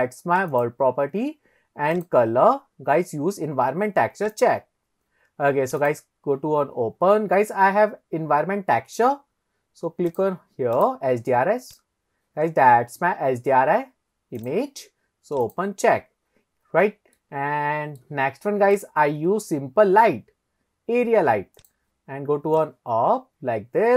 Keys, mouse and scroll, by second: 0.5 click, 2.0-4.5 drag, 5.8 click, 16.4-17.1 scroll down 1, 17.1 scroll down 3, 17.2-18.0 middle drag, 18.7-19.2 drag, 21.7 click, 22.6 click.